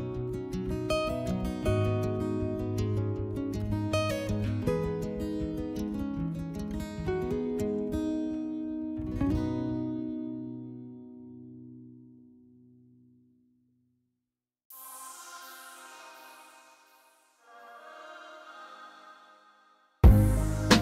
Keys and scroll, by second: 0.9 2, 9.5 3, 15.8 s, 19.5 s.